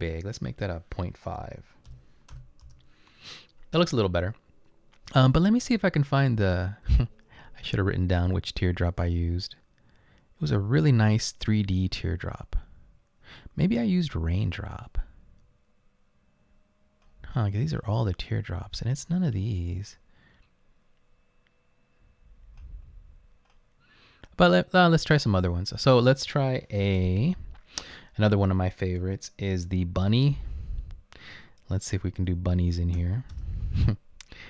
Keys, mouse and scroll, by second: 1.2-2.9 typing, 26.9 BackSpace, 27.3 BackSpace, 27.4 BackSpace, 30.2 b, 32.3-33.5 typing.